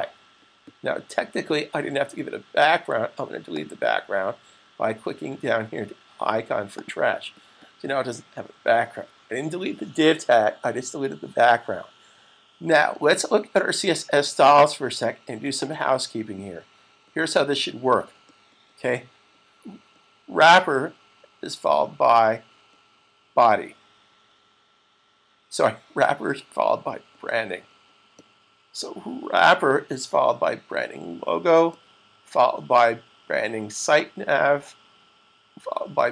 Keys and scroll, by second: 8.8 super+s.